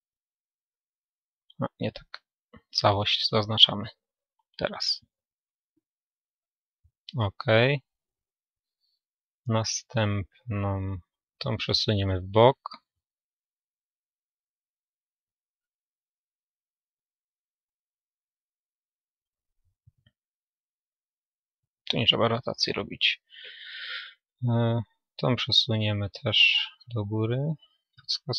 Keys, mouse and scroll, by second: 2.2 a, 2.6 a, 3.9 g, 8.0 click, 8.0-9.7 middle drag, 9.7-11.5 right drag, 10.5-15.2 middle drag, 11.5 a, 15.2 g, 20.1 click, 20.1 r, 23.0 Escape, 23.0-25.9 middle drag, 24.0-27.6 right drag, 25.9 a, 27.6 g.